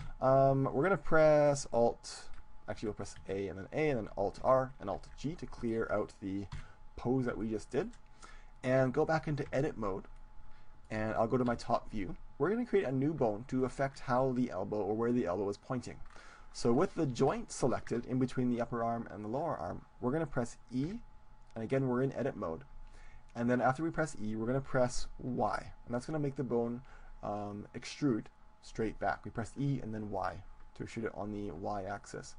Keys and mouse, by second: 0.1 KP_7, 2.8 a, 3.1 a, 4.3 alt+r, 4.9 alt+g, 5.5 middle click, 6.5 KP_1, 8.5 middle click, 9.5 Tab, 11.4 KP_7, 12.8-14.7 drag, 14.7 middle click, 16.1-19.2 middle drag, 20.9 e, 31.0-32.1 drag, 32.1-32.3 middle drag.